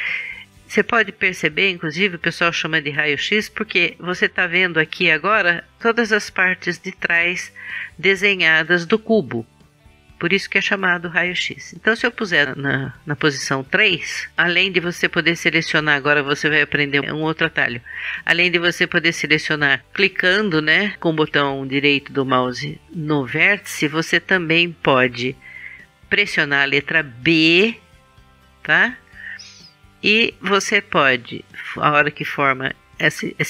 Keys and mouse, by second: 12.3 KP_1, 12.4 KP_3, 26.6 b.